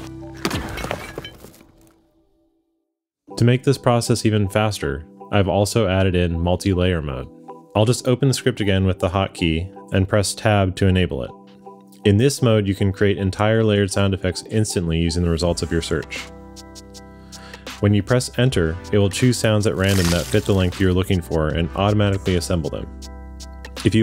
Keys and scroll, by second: 8.9 q, 10.9 Tab, 15.7-17.7 typing, 17.9 Return, 19.5 space, 22.3 space.